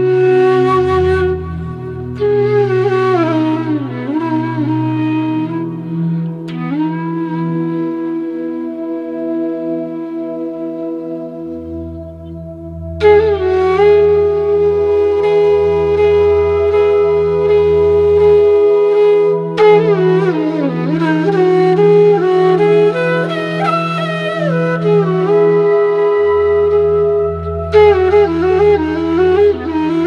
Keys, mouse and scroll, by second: 2.6 right click, 3.1 click, 4.8-12.5 alt+drag, 12.9-14.2 alt+drag, 15.4 click, 17.6-24.7 drag, 24.7 click, 27.4-29.1 alt+drag.